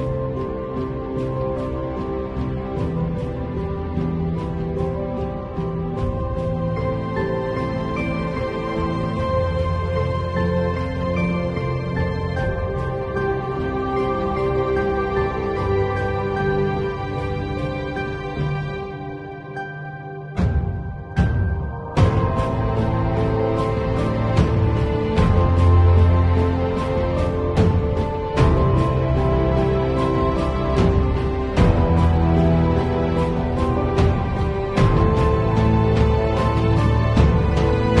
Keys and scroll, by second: 13.2 b, 14.3 ], 16.6 ], 17.7 0, 18.2 [, 21.2 v.